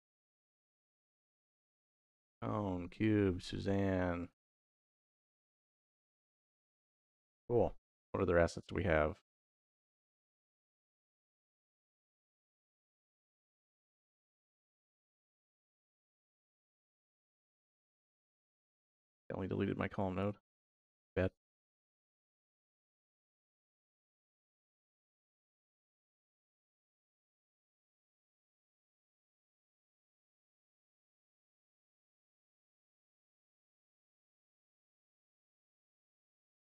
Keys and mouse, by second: 0.3 x, 1.5 click, 2.2 click, 4.0 click, 4.8 x, 5.6 click, 5.8 x, 8.0 x, 10.9 click, 11.8 click, 13.3 ctrl+z, 15.4 middle click, 19.0 shift+a, 23.5-24.1 drag, 24.7 click, 25.5 drag, 26.2-26.7 drag, 27.2-28.4 drag, 29.1-30.0 drag, 30.7 x, 32.0 ctrl+z.